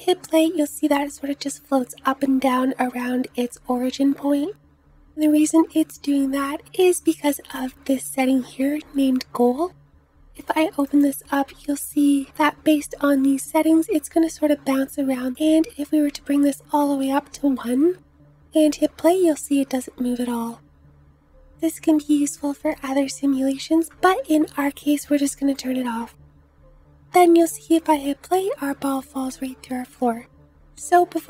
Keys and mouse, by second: 3.1 space, 18.3 space, 20.8 space, 21.3-25.7 drag, 21.3-24.3 right drag, 25.4 middle click, 25.4 right click, 27.5 space, 29.8 space, 30.8-31.2 middle drag.